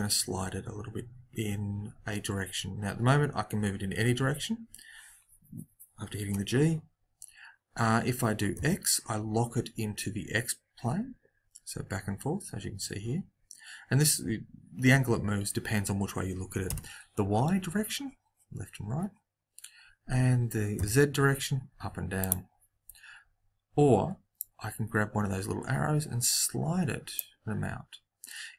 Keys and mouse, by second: 24.3 click.